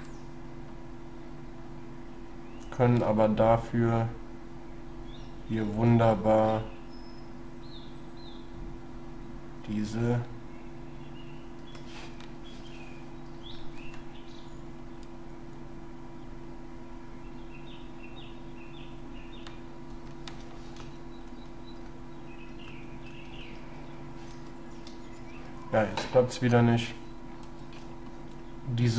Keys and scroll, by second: 3.1 shift+s, 5.7 shift+s, 9.9 shift+s, 20.9 ctrl+y, 21.9 ctrl+<, 22.7 ctrl+y, 24.5 ctrl+z, 27.5 shift+s.